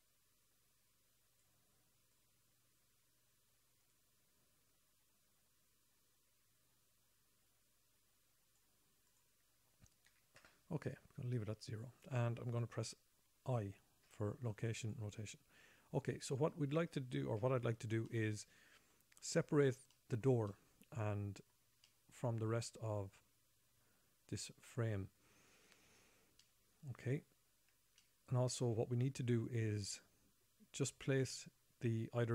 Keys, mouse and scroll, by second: 2.5 click, 2.7 click, 9.5 click, 14.4 i, 15.3 i, 17.8 n, 18.5 middle click, 19.5-20.1 scroll up 6, 20.3 shift+middle click, 20.9 middle click, 21.7 middle click, 22.2 shift+middle click, 23.0-24.9 scroll up 6, 26.8 middle click, 28.4 shift+middle click.